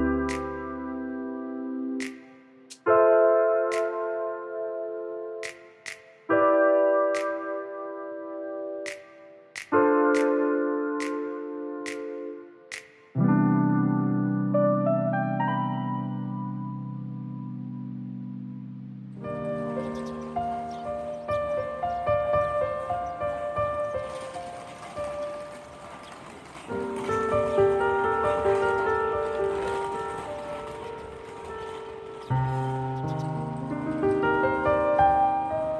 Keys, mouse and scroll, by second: 0.2 alt+click, 0.5 scroll down 2, 4.6 click, 5.7 middle click, 9.4 shift+middle click, 11.2 middle click, 12.0 middle click, 16.2 3, 17.0 alt+click, 21.9 middle click, 24.1 1, 26.2 middle click, 27.8 F3, 30.0 middle click, 33.1 middle click, 33.7 shift+middle click.